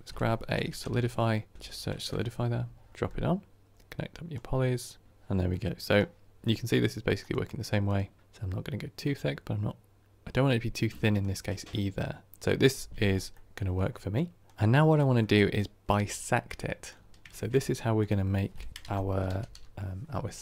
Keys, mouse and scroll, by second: 4.2 click, 5.0 ctrl+right click, 5.4-7.1 middle drag, 7.1 click, 7.8 click, 8.2-11.6 drag, 11.6-20.4 middle drag.